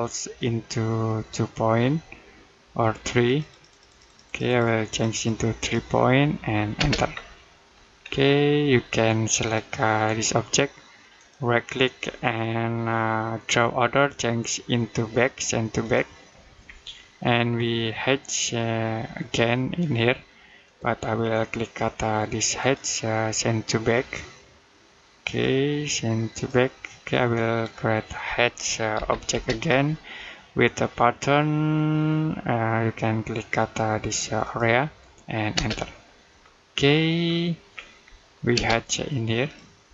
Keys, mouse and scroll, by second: 0.2 click, 6.6 space, 6.9-7.3 scroll down 1, 7.3 middle click, 7.8-9.2 scroll up 1, 9.2 click, 11.0 right click, 15.6 click, 16.6 middle click, 17.4-18.5 scroll up 1, 20.5 click, 22.4 right click, 25.1 click, 28.8 h, 29.2 space, 34.3 click, 35.4 space, 36.2-36.7 scroll down 1, 36.7 middle click, 37.6-38.0 scroll up 1, 38.0 middle click, 38.4 space, 39.3 click.